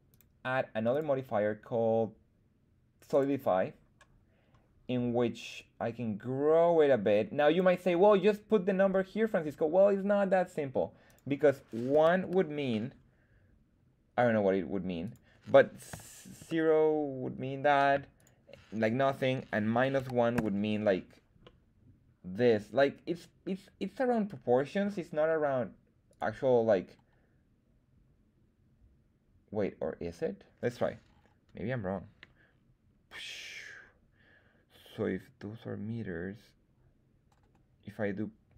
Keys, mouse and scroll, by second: 0.0 click, 0.8-3.2 drag, 5.5-7.6 drag, 11.0-12.9 drag, 15.0-17.9 drag, 18.1-21.0 drag, 21.4-24.8 middle drag, 24.8 scroll down 1, 26.0-38.5 drag.